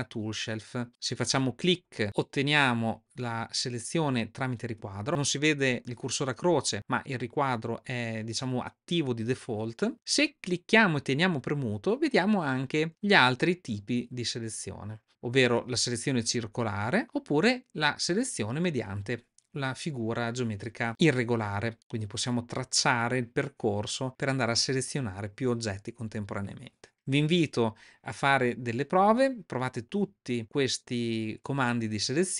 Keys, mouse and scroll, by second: 5.8-6.7 drag, 8.8 click, 9.9-21.0 drag, 22.1-25.3 drag, 28.4-31.6 drag.